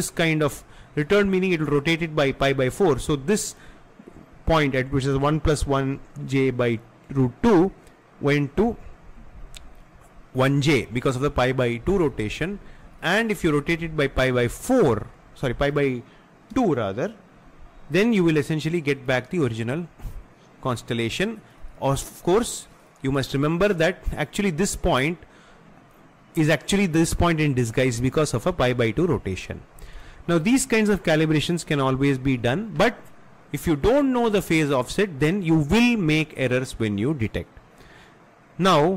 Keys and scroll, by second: 16.6 BackSpace, 17.1 2.